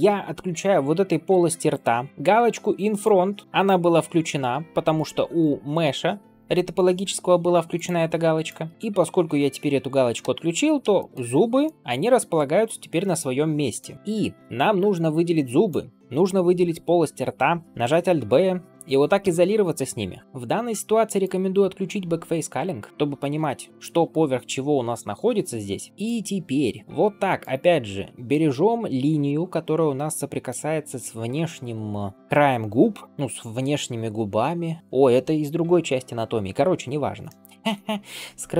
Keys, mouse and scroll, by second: 0.4 scroll down 2, 1.2 g, 2.0 scroll up 2, 2.1 ctrl+space, 2.1 click, 2.1 scroll down 2, 2.9 click, 5.3-9.9 drag, 10.1 ctrl+space, 10.9 shift+middle click, 11.2 scroll up 1, 11.5-13.7 middle drag, 13.9-14.4 drag, 14.5 shift+click, 15.5 shift+click, 16.2-16.6 scroll down 1, 17.6 alt+b, 19.1 KP_Divide, 20.4 shift+middle click, 21.1-22.9 drag, 22.9 scroll down 1, 22.9 scroll up 1, 23.3-25.9 middle drag, 25.9 Tab, 26.8 middle click, 27.3 alt+click, 28.5 shift+middle click, 28.9-29.2 scroll up 1, 29.2-30.4 middle drag.